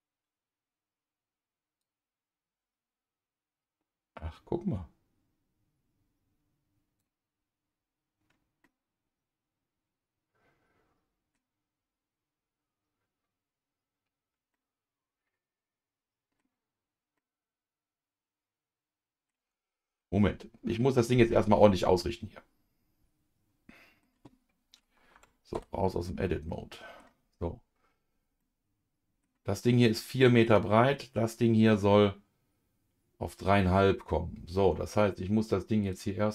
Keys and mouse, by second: 1.8-7.0 drag, 8.6-11.3 middle drag, 14.5-16.4 middle drag, 17.1-19.3 middle drag, 20.2 ctrl+z, 21.9-24.0 middle drag, 25.1 Tab, 25.5 KP_Divide, 26.5 middle click, 28.4 middle click, 29.9 middle click, 35.8-36.3 drag.